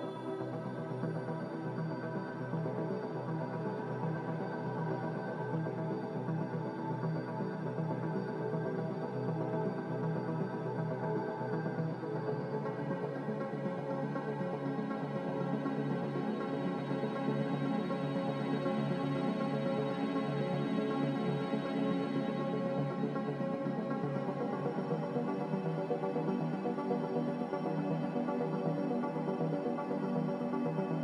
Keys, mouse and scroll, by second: 9.6 ctrl+z, 12.2 Delete, 14.6 x, 16.2-17.1 typing, 21.1-22.2 typing, 21.4 Return.